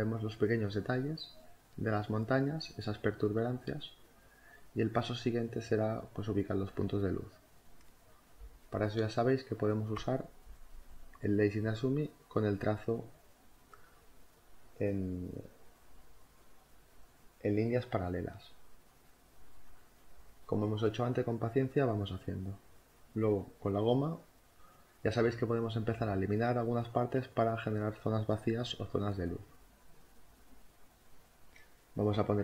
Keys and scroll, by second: 15.4 space, 17.5 ctrl+z, 17.8 4, 25.1 b, 30.1 space.